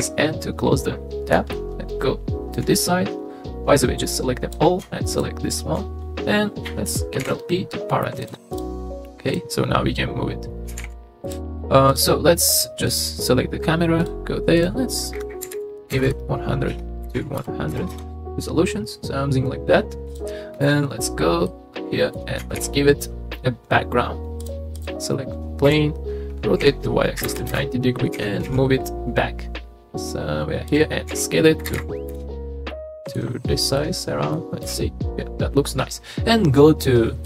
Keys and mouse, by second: 0.0 n, 1.5 shift+middle click, 2.5 shift+middle click, 2.8 click, 4.2-4.5 drag, 7.2 ctrl+p, 8.5 click, 9.3 click, 10.7 g, 10.8 z, 11.2 click, 11.9 click, 12.9 click, 14.0 click, 14.7-16.1 drag, 16.1 KP_0, 20.1 click, 20.6 KP_0, 21.4-22.2 middle drag, 22.6 shift+a, 25.6-28.4 typing, 27.5 KP_Enter, 31.1 s, 31.7 KP_1, 31.7 KP_5, 32.1 KP_Enter, 32.7-33.2 middle drag, 33.8-34.3 middle drag, 34.6 KP_0.